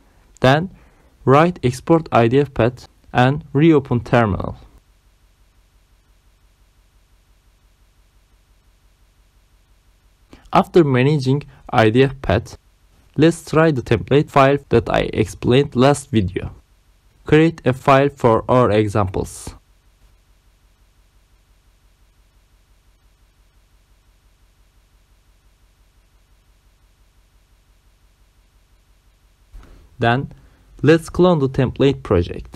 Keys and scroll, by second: 15.5-19.9 typing, 21.0 Return, 21.8-23.4 typing, 23.9 Return, 28.8 ctrl+c, 29.1 alt+Tab, 29.8-31.4 typing.